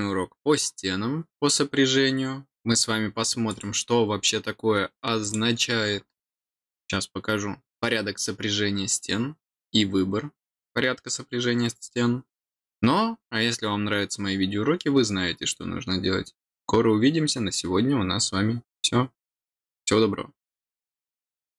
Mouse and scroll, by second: 3.4 click, 5.2 click.